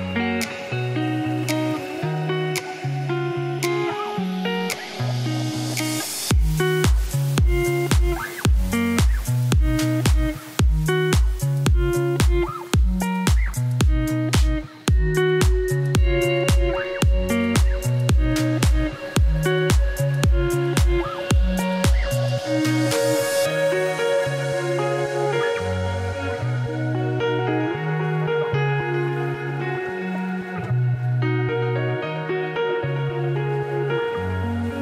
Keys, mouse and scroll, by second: 0.9 a, 1.3 middle click, 1.8 f, 2.2 middle click, 3.1 e, 4.0 middle click, 4.2 Tab, 4.4 shift+a, 5.8-6.8 drag, 6.8 Tab, 6.9 1, 8.1 KP_7, 8.3 z, 8.8 g, 10.8 KP_1, 11.6 e, 12.9 s, 13.7 KP_7, 14.2 g, 15.0 middle click, 15.6 Tab, 16.1-18.0 drag, 18.0 middle click, 18.4 Tab, 18.6 2, 19.1 alt+click, 19.7 Tab, 20.0 shift+a, 23.8-25.2 drag, 25.2 Tab, 25.4 s, 26.7-30.5 typing, 27.9 Tab, 28.5 Tab, 28.7-29.0 scroll up 1, 31.6 s, 34.2 shift+middle click, 34.4 scroll up 1, 34.5 ctrl+r.